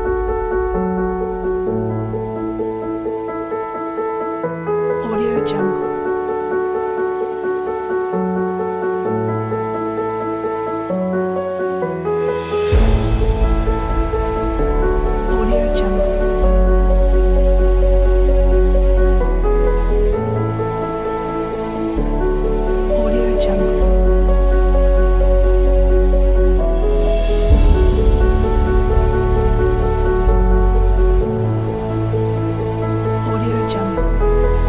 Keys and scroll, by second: 16.1 space.